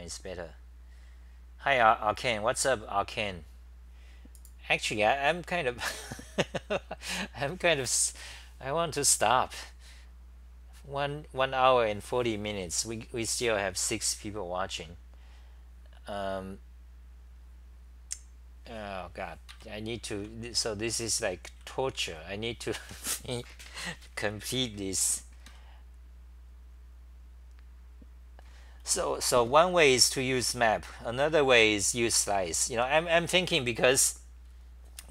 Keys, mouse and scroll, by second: 19.5 ctrl+g, 19.8 c, 19.9 c, 21.4-22.8 typing, 25.5 ctrl+g, 28.8 c, 29.0-32.2 scroll, 29.0 c, 32.2 c, 32.3 c.